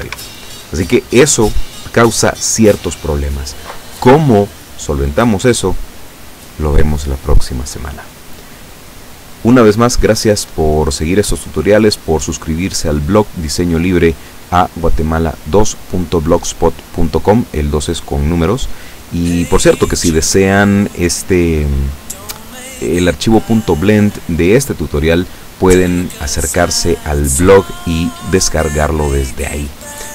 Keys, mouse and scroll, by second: 0.1 Escape.